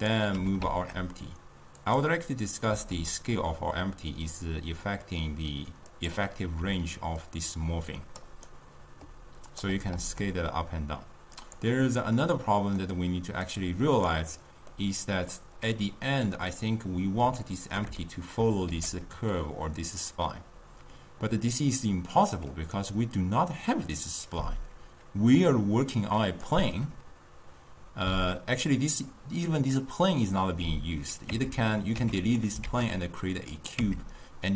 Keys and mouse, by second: 0.1 click, 0.4 g, 2.8 s, 6.7 d, 7.2 d, 7.3 click, 8.3 d, 8.6 right click, 9.8 d, 10.1 s, 12.3-13.8 middle drag, 13.8 click, 14.9-18.8 middle drag, 18.8 g, 26.3 click, 31.4 Tab, 32.1 x, 32.8 shift+a, 33.9 Tab.